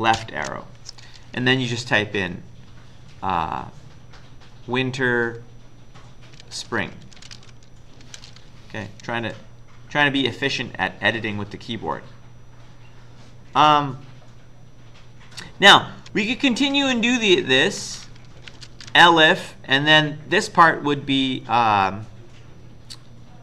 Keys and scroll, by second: 0.2 ctrl+shift+Left, 6.2-8.3 typing, 13.4 End, 16.2 Return, 16.9-19.2 typing.